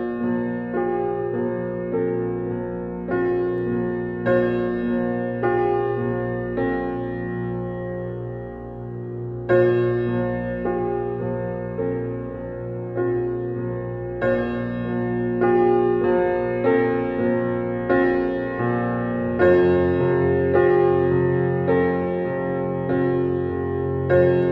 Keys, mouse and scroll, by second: 1.0 scroll down 1, 2.6 scroll up 1, 3.9 click, 4.3-4.6 scroll down 1, 4.6 scroll up 1, 5.5 scroll down 1, 6.5 click, 7.3 scroll down 1, 8.3-9.4 typing, 9.7 scroll up 1, 10.7 click, 11.1-11.5 scroll down 1, 12.4-13.3 scroll up 1, 13.3 click, 15.6 click, 16.0-16.4 scroll down 1, 17.6-18.0 scroll up 1, 18.0-18.3 scroll down 1, 18.7 ctrl+z, 19.1 scroll down 1, 19.5-20.0 scroll up 1, 20.6 scroll down 1, 22.0-22.4 scroll up 1, 22.4-23.1 scroll down 1, 23.7-24.5 scroll up 1.